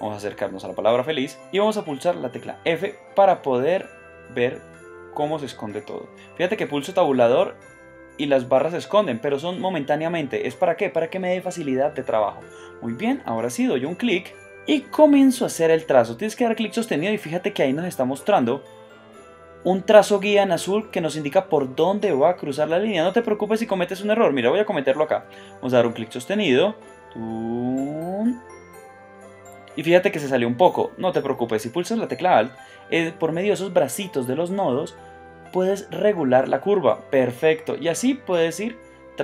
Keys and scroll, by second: 0.0 space, 2.5 Tab, 3.7 f, 6.8 Tab, 9.7 Tab, 11.2 Tab, 11.8 Tab, 12.4 space.